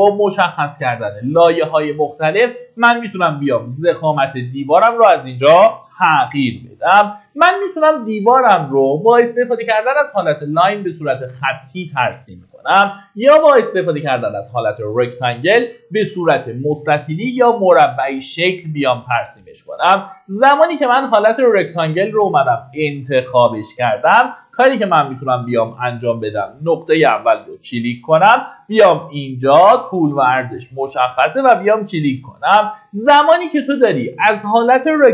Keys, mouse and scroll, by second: 2.2-3.5 scroll down 1, 6.9 Escape, 22.0 click, 23.5 scroll down 1, 26.4-35.1 drag.